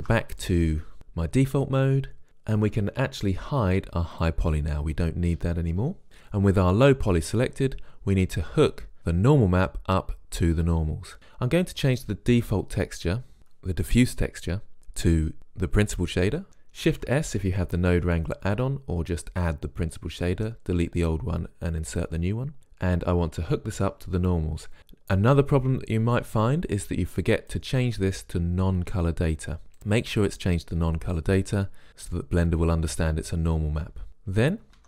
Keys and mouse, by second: 0.0 shift+space, 4.2-13.4 drag, 17.0 shift+s, 22.6 click, 27.4-29.4 drag.